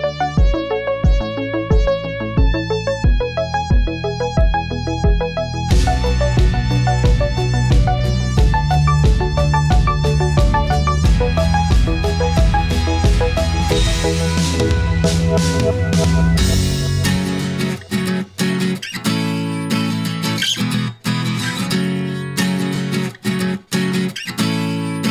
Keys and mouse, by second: 1.4-2.4 drag, 3.5-4.7 drag, 5.3-7.4 drag, 8.0-8.4 middle drag, 9.6 click, 10.8 middle click, 11.6 click, 12.7 shift+a, 21.7 middle click.